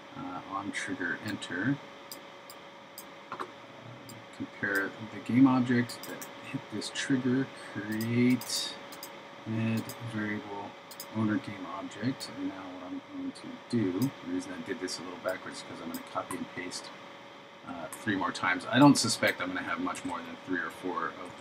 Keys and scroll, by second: 20.0 super+c, 21.3 super+v.